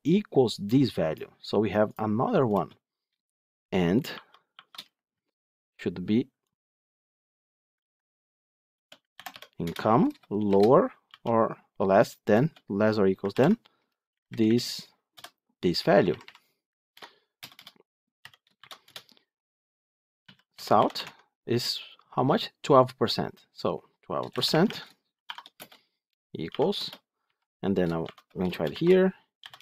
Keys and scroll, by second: 7.7 ctrl+c, 9.5 Return, 13.2 ctrl+v, 20.9 Tab.